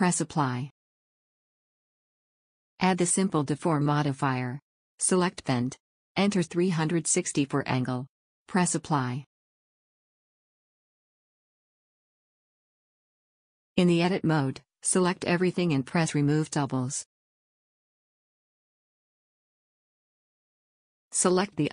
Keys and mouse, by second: 1.3 middle click, 1.5-5.1 drag, 10.9 click, 14.6 Tab, 17.1 click, 20.1 a.